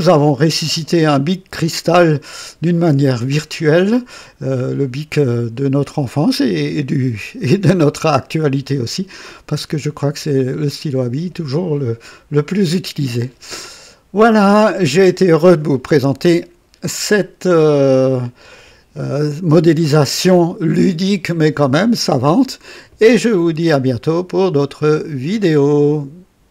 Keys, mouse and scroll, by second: 4.4-7.2 drag, 8.1 click, 25.3 right click, 26.4 click.